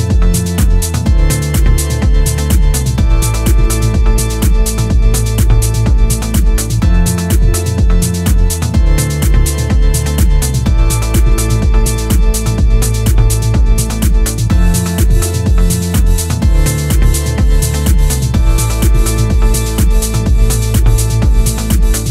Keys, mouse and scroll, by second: 6.3 click, 14.7-16.2 scroll down 1.